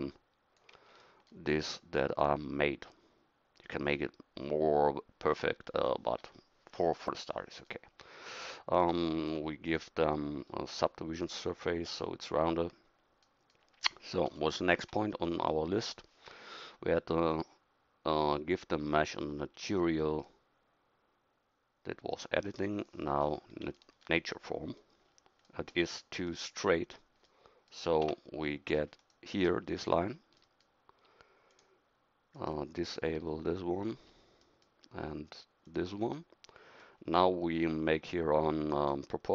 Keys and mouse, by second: 0.1 KP_1, 1.6 Tab, 14.3 KP_1, 28.0 Tab, 33.3-35.7 middle drag.